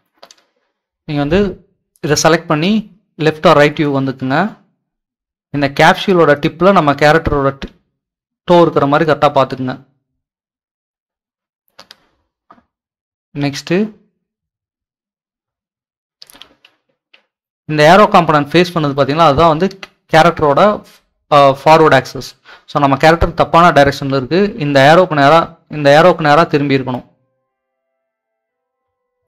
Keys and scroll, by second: 6.1 typing, 16.9 s, 18.0 d, 18.3 w.